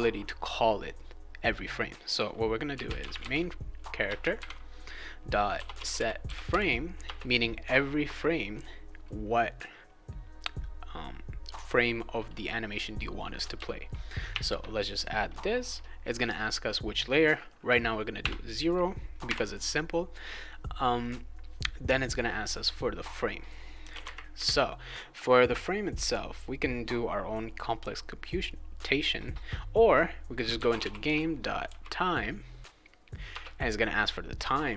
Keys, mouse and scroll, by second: 2.5-7.0 typing, 4.0 Return, 7.0 Return, 14.3 shift+9, 18.2 0, 19.2 ,, 23.9 ;, 30.2-31.6 typing, 33.3 Return.